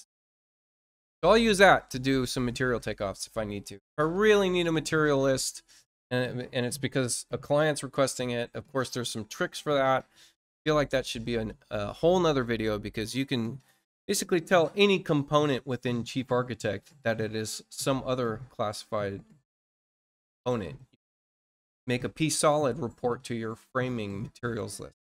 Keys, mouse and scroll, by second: 0.1 click.